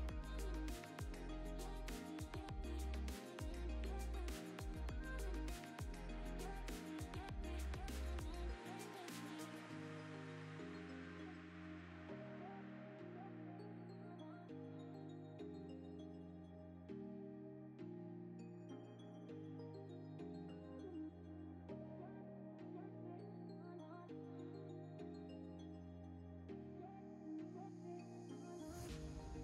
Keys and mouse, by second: 0.1 Tab, 0.3 a, 0.6 u, 1.0 Tab, 1.3 ctrl+s, 1.5 click, 2.5 click, 2.8 ctrl+s, 4.7 click, 5.1 Tab, 5.3 Tab, 5.8 click, 6.5 click, 8.3 Tab, 8.7 Tab, 9.2 Tab, 9.5 u, 10.3 Tab, 10.8 ctrl+s, 11.3 click, 11.6 ctrl+s, 12.4 click, 12.8 s, 13.4 ., 13.6 z, 14.0 s, 16.0 click, 16.5 click, 16.9 ctrl+s, 17.0 z, 17.7 click, 18.6-20.1 drag, 20.4 click, 20.8 click, 20.9 g, 22.2 g, 23.4 g, 26.1-26.6 drag, 27.1 shift+click, 28.2 click, 29.0-29.4 shift+drag.